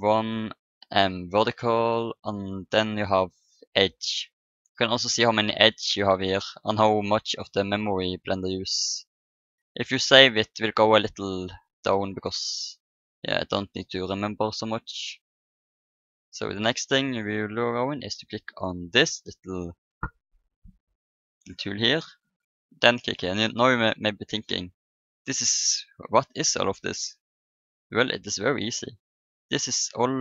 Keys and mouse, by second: 3.4-5.2 drag, 4.6-6.2 right drag, 21.3-25.0 drag.